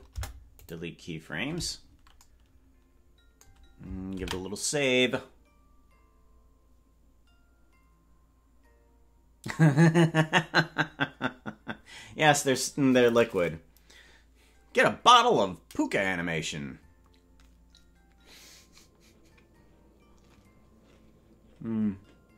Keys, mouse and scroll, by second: 0.1 Delete, 7.6 ctrl+s.